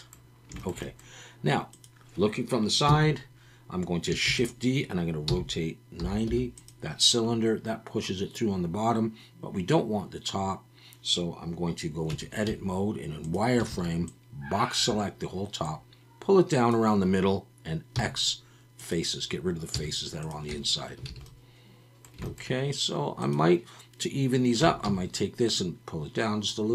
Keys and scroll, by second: 2.9 KP_3, 4.3 shift+d, 5.3 r, 6.0 9, 6.3 0, 12.1 Tab, 12.5 z, 13.7 alt+a, 17.9 x, 19.7 z, 20.5 Tab, 21.1 alt+a, 24.6 Tab, 24.8 a.